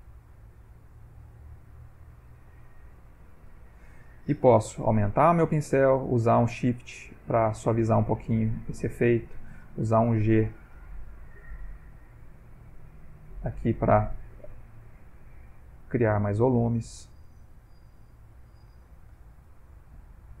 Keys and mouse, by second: 0.7 click, 1.5 click, 2.3 click, 4.8 f, 5.8 shift+click, 6.2 shift+click, 6.6 shift+click, 6.9 shift+click, 7.0 shift+click, 7.3 shift+click, 7.4 shift+click, 7.6 shift+click, 7.8 shift+click, 8.0 shift+click, 8.1 shift+click, 8.2 shift+click, 8.3 shift+click, 8.5 shift+click, 8.8 shift+click, 9.1 shift+click, 9.7 g, 9.9 click, 10.6 click, 11.1 click, 11.5 click, 12.1 click, 12.7 click, 13.4 click, 14.4 click, 15.1 click, 15.7 click, 16.2 click, 17.1 shift+middle click, 18.1 ctrl+middle click, 19.8 click.